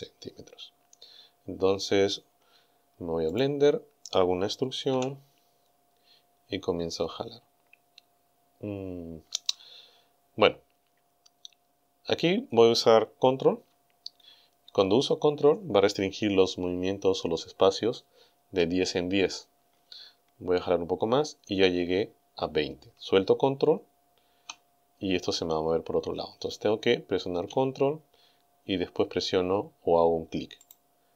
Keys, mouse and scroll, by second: 3.4 click, 5.0 e, 30.7 ctrl+click.